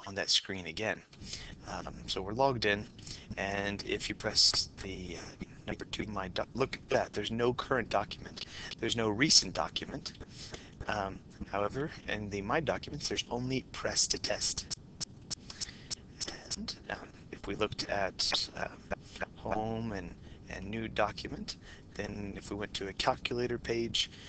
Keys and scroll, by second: 3.2 Return, 8.6 4, 10.3 Right, 10.7 Right, 12.2 2, 13.4 Down, 19.6 Home, 20.9 1, 23.1 Return.